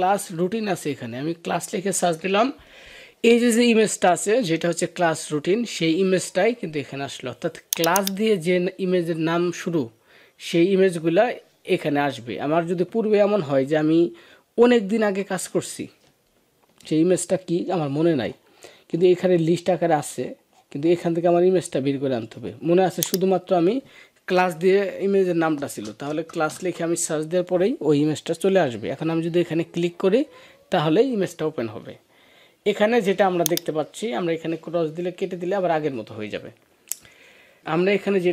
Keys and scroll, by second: 14.9 BackSpace.